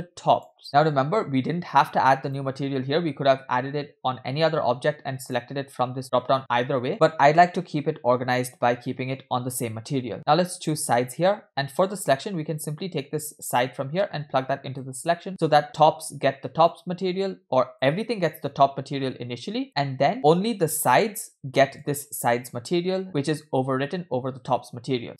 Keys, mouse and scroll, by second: 0.3 click, 2.3 click, 5.3-6.9 drag, 10.1 click, 13.0-14.9 drag, 16.5 click, 17.8-19.6 drag, 21.8 drag.